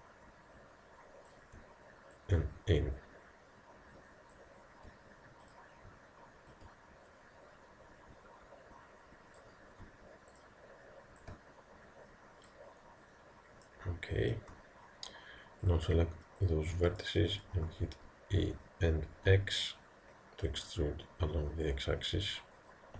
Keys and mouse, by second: 2.2 click, 13.8-15.7 middle drag, 15.7-18.2 drag, 17.0-21.6 middle drag, 18.5 e.